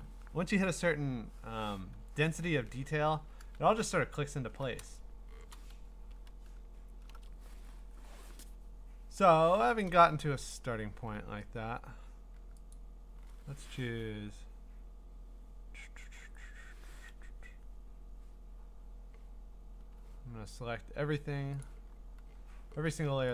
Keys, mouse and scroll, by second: 4.0-4.9 scroll, 5.5 scroll, 5.5 click, 6.2 scroll, 10.4-11.1 scroll, 12.7 click, 15.0 click, 19.8 Escape, 20.5-21.5 scroll, 21.7 click, 22.0-23.1 scroll.